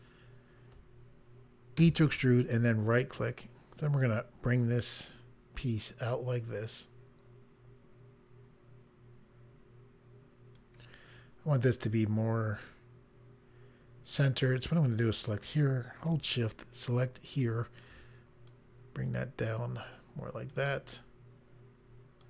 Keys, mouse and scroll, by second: 1.7 e, 2.3 right click, 3.9 click, 14.9 click, 17.2 shift+click, 18.4 click, 22.1 click.